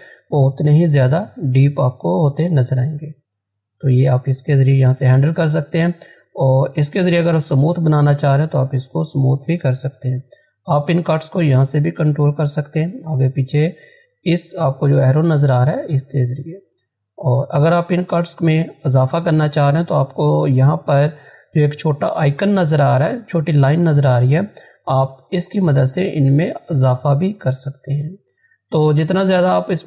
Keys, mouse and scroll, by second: 1.2 click, 6.8 click, 10.1-14.3 drag, 16.8-20.8 drag, 21.1 click, 21.3-21.6 scroll up 1, 24.7 scroll up 1, 24.7-27.9 drag.